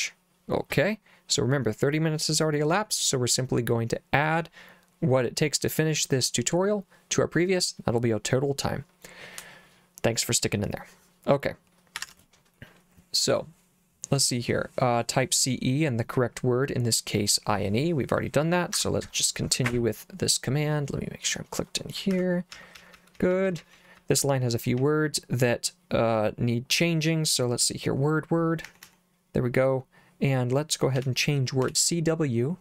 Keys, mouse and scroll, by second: 12.1 alt+Tab, 13.3 click, 18.8 Escape, 19.6 j, 21.3 click, 22.2 Escape, 22.3-25.3 typing, 28.7 w, 28.9 w, 31.0 c, 31.7 w.